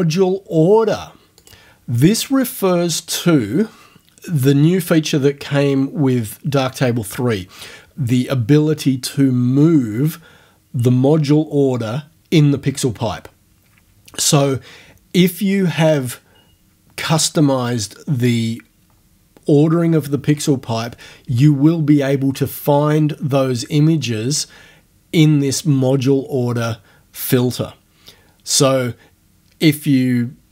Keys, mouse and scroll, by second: 1.4 click.